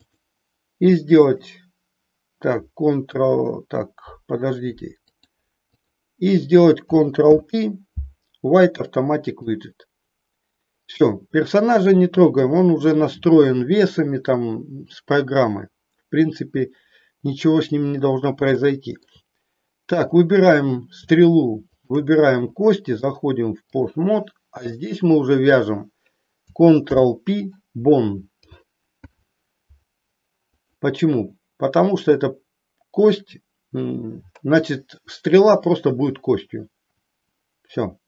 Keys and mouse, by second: 0.0-1.5 drag, 5.0-6.0 drag, 7.1 ctrl+p, 18.6 shift+middle click, 20.0 click, 21.6 shift+click, 22.9-23.9 drag, 24.5 click, 26.8 ctrl+p, 28.9 ctrl+p.